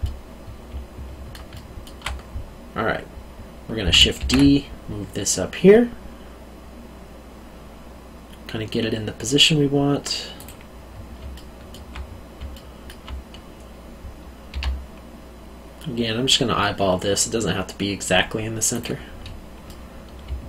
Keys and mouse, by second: 0.0 middle click, 0.6 alt+middle click, 4.2 shift+d, 10.3 click, 11.3 alt+middle click, 12.5 alt+middle click, 14.5 g, 18.7 click, 19.6 middle click, 20.2 alt+middle click.